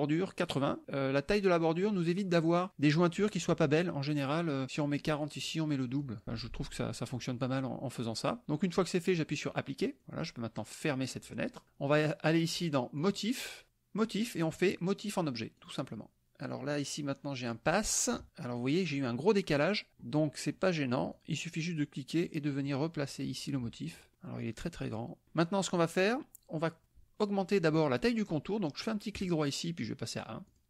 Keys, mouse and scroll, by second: 4.8-8.3 drag, 10.0 click, 10.9 click, 13.0 click, 15.6 click, 16.8 click, 18.2 KP_Subtract, 20.4 click, 21.2 click, 22.2-24.0 drag, 24.8 click, 29.2 right click, 30.5 click.